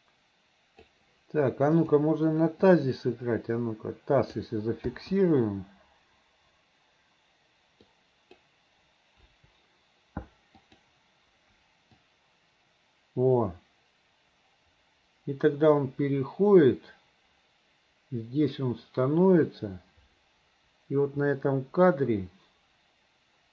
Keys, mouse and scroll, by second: 1.7 click, 3.0-4.5 drag, 4.9 i, 8.0 click, 9.3 Delete, 10.7 click, 12.1-23.5 drag.